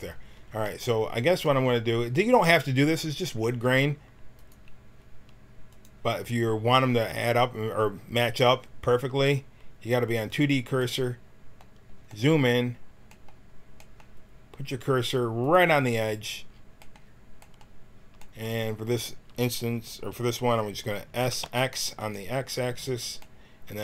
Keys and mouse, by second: 3.7 s, 6.9-21.2 drag, 21.2 s.